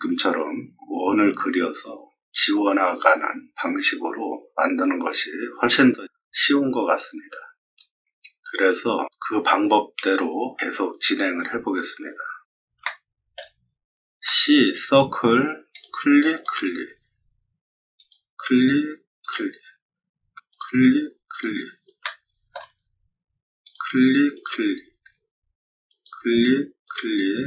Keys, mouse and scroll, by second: 12.4 middle click, 12.8-13.3 shift+middle drag, 15.6 click, 16.3 click, 17.9 click, 19.2 click, 20.4 click, 21.2 click, 22.0 shift+middle click, 22.0-22.5 scroll, 23.6 click, 24.3 click, 25.8 click, 26.8 click.